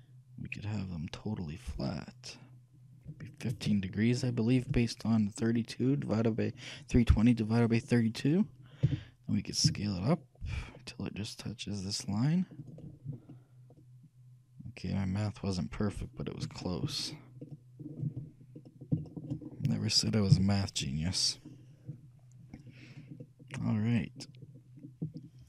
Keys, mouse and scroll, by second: 5.4-7.4 middle drag, 9.0 s, 13.1-15.3 middle drag, 16.4-17.2 scroll up 1, 17.6-25.1 middle drag, 20.5 shift+KP_3.